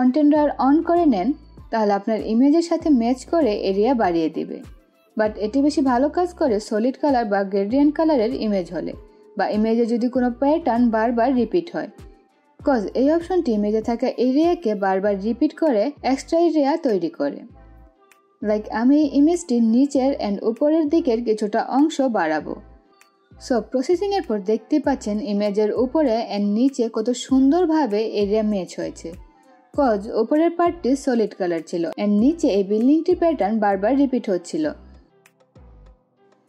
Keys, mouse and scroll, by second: 0.5-5.0 drag, 5.0-6.5 drag, 18.9 click, 20.6-24.3 drag.